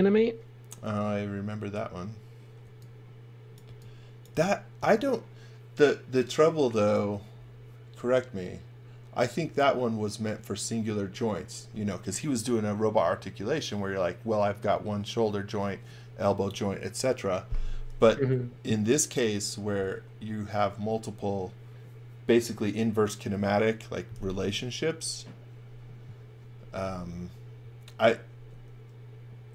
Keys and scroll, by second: 2.6 x, 3.7 v.